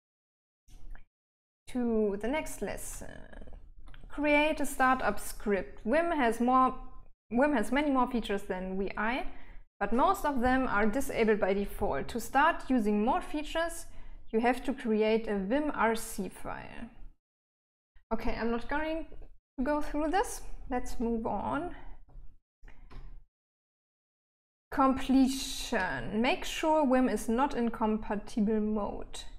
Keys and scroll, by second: 1.8-4.5 typing, 21.3-26.1 typing.